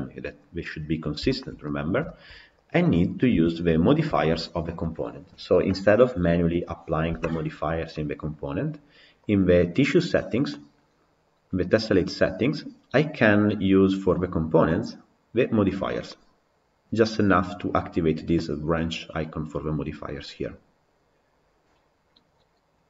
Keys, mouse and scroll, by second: 0.0-1.0 scroll down 2, 1.0 scroll down 1, 1.1-2.5 shift+middle drag, 2.5 click, 3.1 KP_Decimal, 3.9-22.8 shift+middle drag.